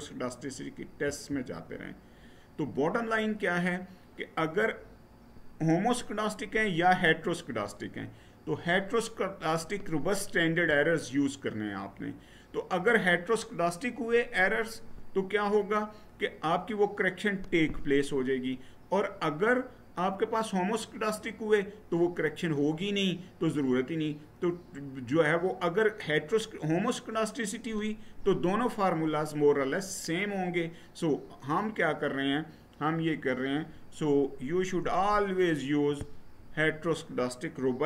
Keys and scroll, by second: 0.8 Right.